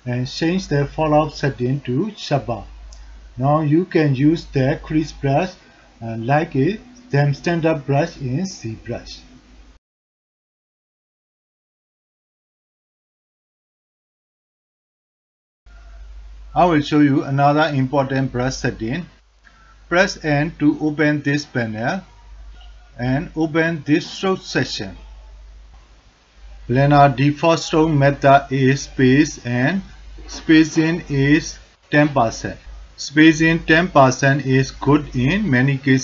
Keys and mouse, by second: 1.4-5.7 drag, 6.6 alt+click, 7.4 ctrl+alt+click, 7.6 alt+f, 7.6 alt+click, 9.2 f, 10.6 f, 11.4-12.1 drag, 12.5-13.0 drag, 13.4 drag, 14.1 middle click, 14.6 ctrl+alt+click, 15.6 alt+n, 15.6-16.1 ctrl+alt+drag, 16.3 alt+shift+click, 16.7 alt+click, 17.5 ctrl+alt+drag, 19.4 n, 20.1 n, 24.8 click, 25.4 alt+middle click, 26.9 click, 27.5 alt+middle click, 28.0 ctrl+alt+middle drag, 28.3 shift+click, 28.7 alt+drag, 29.1 ctrl+alt+click, 29.4 alt+shift+drag, 31.1 alt+shift+middle click, 31.4 alt+shift+middle click, 33.9 ctrl+alt+middle click, 34.3 ctrl+alt+middle click, 35.0 f, 35.8 middle click.